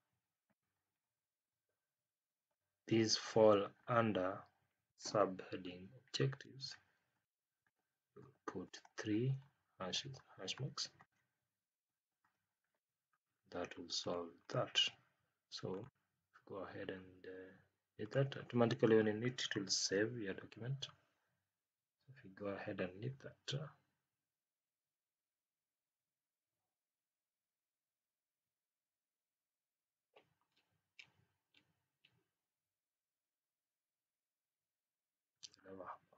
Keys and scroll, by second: 0.9 Down, 2.2 Up, 3.7 Down, 9.1 Down, 10.1 Left.